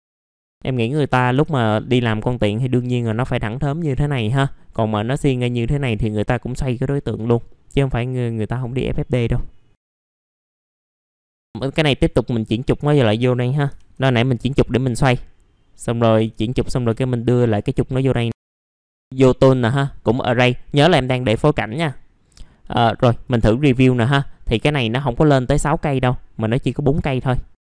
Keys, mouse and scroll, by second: 1.9-2.6 scroll down 1, 2.6 middle click, 2.9-3.5 scroll up 1, 7.0 middle click, 7.4 scroll up 1, 7.8 middle click, 8.8-9.1 scroll up 1, 9.9 scroll down 1, 10.1 middle click, 10.3 alt+middle click, 10.7 F4, 11.0 middle click, 11.5 click, 13.2 middle click, 14.1 scroll down 1, 14.7 middle click, 15.8 click, 17.5 click, 17.9 scroll down 1, 18.2 alt+middle click, 19.0-25.2 drag.